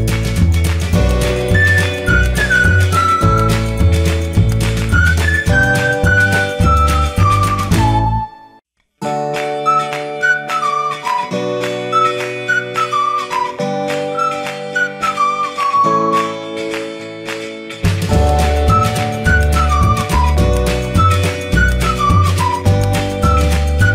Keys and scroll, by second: 1.0 y.